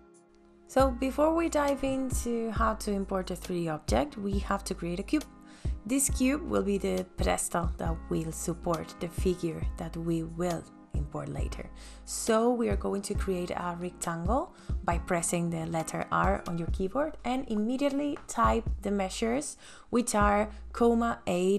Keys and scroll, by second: 9.8 r, 19.6 ,, 19.8 KP_8, 20.9 shift+,.